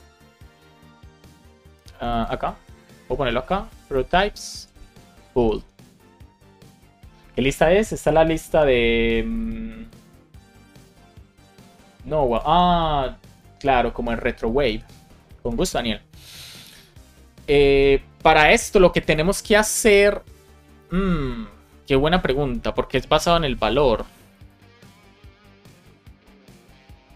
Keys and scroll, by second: 2.6 Return, 2.9 super+v, 3.2 shift+;, 3.5 space, 3.7 shift+p, 4.5 Return, 5.9 BackSpace, 6.5 BackSpace, 7.3 super+s.